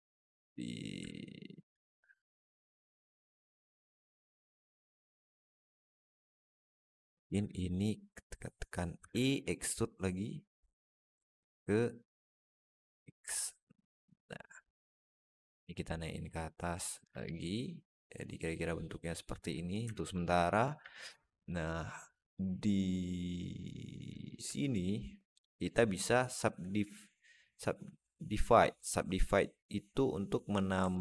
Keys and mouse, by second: 0.9 alt+middle click, 1.7 alt+shift+middle click, 2.0 alt+middle click, 2.5 alt+shift+middle click, 3.1 Tab, 3.5 alt+middle drag, 7.0 Tab, 7.3 click, 8.8 e, 13.2 middle click, 15.0 click, 15.8 click, 17.0-19.3 alt+middle drag, 19.8 alt+shift+middle click, 20.7 alt+middle click, 21.2 click, 22.2 click, 30.8 alt+middle click.